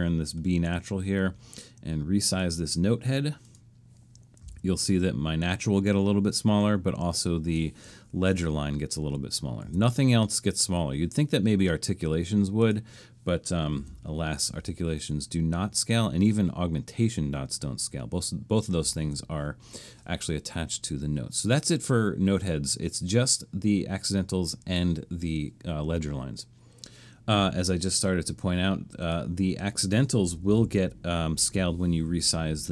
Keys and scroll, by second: 4.2-5.0 typing, 9.6 super+z, 13.5-14.3 typing, 15.5-16.4 typing, 19.0 super+z, 30.2-31.0 typing.